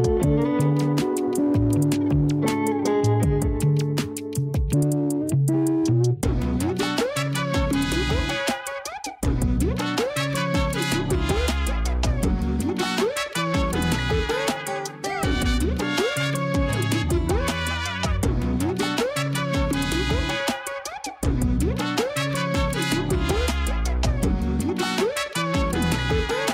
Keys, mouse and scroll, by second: 4.2-5.4 drag, 12.1 click, 13.2-16.2 drag, 18.7 scroll down 1, 20.0 a, 20.2 a, 21.4-21.8 scroll up 2, 22.2-23.1 shift+middle drag, 23.1 scroll up 1, 23.6-24.8 scroll down 1.